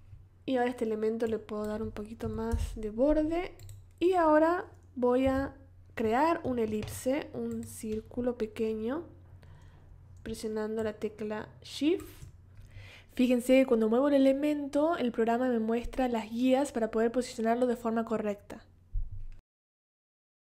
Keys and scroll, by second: 2.2 4, 2.5 Return, 5.2 o, 14.2 v.